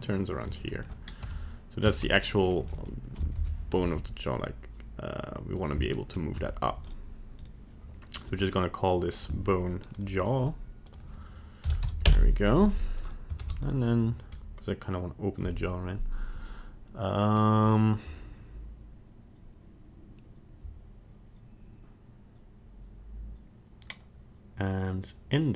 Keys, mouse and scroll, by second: 0.4 middle click, 1.3 Tab, 2.0 ctrl+Tab, 2.2 right click, 2.5 middle click, 3.2 KP_1, 3.3 KP_3, 3.8 r, 6.0 middle click, 6.3 scroll up 1, 6.9 right click, 7.4 right click, 8.1 click, 10.8 click, 13.1 right click, 13.4 ctrl+Tab, 13.6 right click.